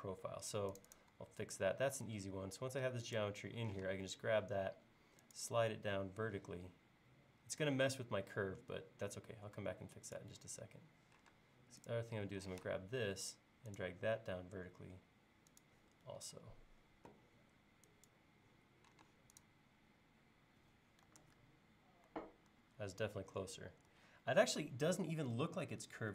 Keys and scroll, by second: 3.8 m, 11.4 space, 12.6 m, 16.3 e, 19.1 space, 21.2 super+Tab, 22.5 super+Tab, 23.9 super+Tab.